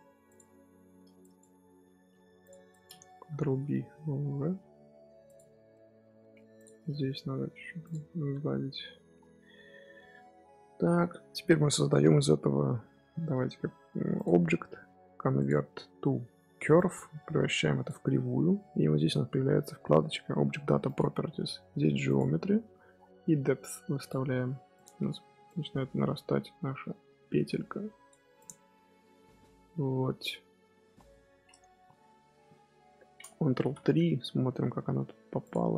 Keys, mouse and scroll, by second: 0.5 middle click, 1.1 click, 1.8 g, 2.6 click, 3.2 ctrl+b, 5.4 Tab, 5.6 middle click, 6.1 Tab, 6.5 click, 6.7 middle click, 7.0 g, 7.8 Tab, 8.2-9.1 middle drag, 9.1 scroll up 1, 9.3-10.0 scroll down 3, 10.0-13.1 middle drag, 14.1-17.2 drag, 20.8 click, 22.0-28.4 drag, 28.6-31.8 middle drag, 32.1 KP_1, 33.5 ctrl+KP_3, 34.4-34.7 shift+middle drag, 34.7-35.3 scroll up 2, 35.3 click.